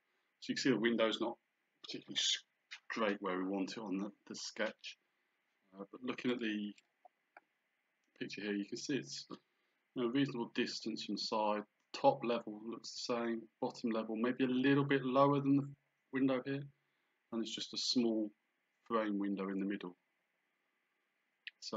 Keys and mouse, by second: 6.3 click.